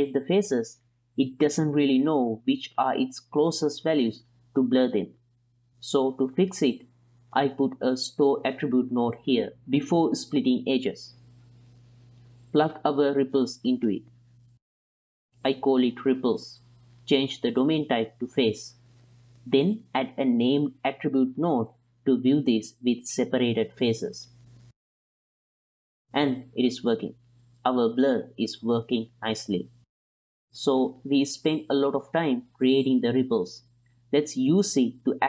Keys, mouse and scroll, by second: 0.1-0.6 middle drag, 1.5 middle drag, 3.1 click, 5.9 drag, 6.4 click, 7.5 ctrl+shift+click, 8.6 shift+a, 11.5 click, 12.3 ctrl+shift+click, 13.4-14.4 drag, 15.0 click, 15.2 click, 15.6-16.9 drag, 16.5 p, 17.0 x, 17.4 ctrl+click, 18.3-18.7 drag, 19.7 shift+a, 21.8 ctrl+c, 22.3 ctrl+v, 23.4 ctrl+shift+click, 24.4 ctrl+shift+click, 25.2-27.3 middle drag, 27.8 middle click, 27.9 middle click, 28.1 middle click, 28.8 click, 29.2 click, 29.8 click, 30.4 click, 30.6 m, 31.8 m, 33.1 ctrl+click, 33.3 click, 33.6 ctrl+click, 33.9 click, 34.4 click, 34.8 click.